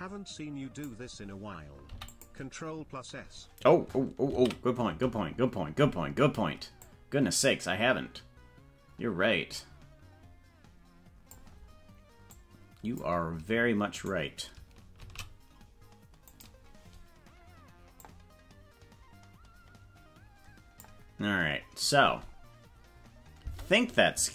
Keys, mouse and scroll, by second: 4.8 ctrl+s, 6.8-11.4 drag, 12.3 click, 13.9 right click, 15.0 shift+d, 18.0-20.8 drag, 22.0 space, 23.4 space.